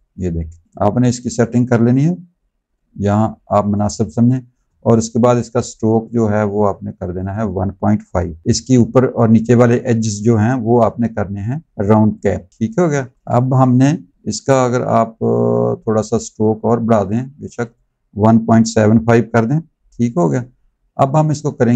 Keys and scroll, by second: 12.7 z, 13.2 v.